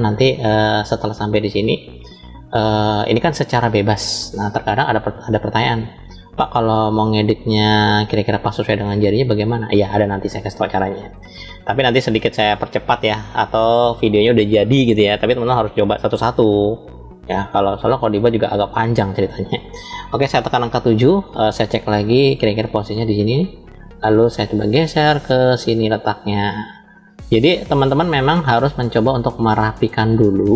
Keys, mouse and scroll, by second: 0.4-1.0 scroll down 1, 1.2 shift+middle click, 2.4-3.4 middle drag, 8.0-8.8 scroll up 2, 8.9 shift+middle click, 10.1-10.7 scroll up 1, 10.7-12.1 middle drag, 16.3 scroll up 3, 17.1-19.1 middle drag, 20.2 KP_7, 21.7 shift+middle click, 22.8 click, 24.8-26.5 drag, 26.9-27.7 scroll up 4, 27.7 shift+middle click, 28.6 scroll up 2, 29.5 shift+middle click, 30.4 click.